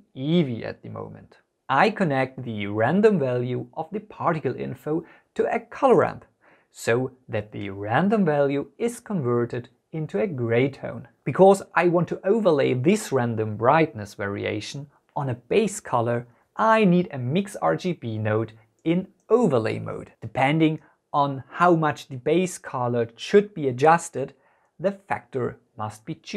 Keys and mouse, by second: 3.1 shift+a, 8.7 drag, 8.8-9.5 drag, 10.3-11.6 drag, 12.2 click, 14.0 shift+a, 18.0-20.5 drag, 22.3-23.5 drag, 24.2 click, 24.8 click.